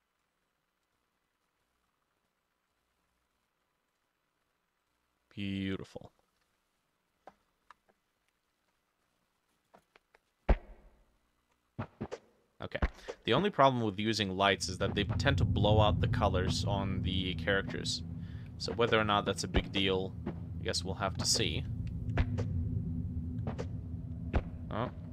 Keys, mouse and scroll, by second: 1.6 middle click, 6.0 middle click, 6.5 ctrl+s, 7.3 middle click, 7.7 F6.